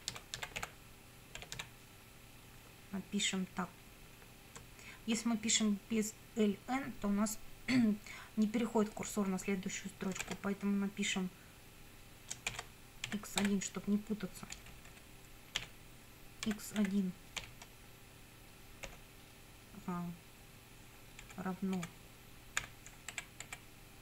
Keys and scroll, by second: 0.0-2.1 typing, 10.2 shift+9, 12.5 shift+', 13.1 x, 13.4 1, 14.5 BackSpace, 16.5 x, 16.8 1, 18.9 ,, 21.3 Left, 22.6 =, 23.1 Right.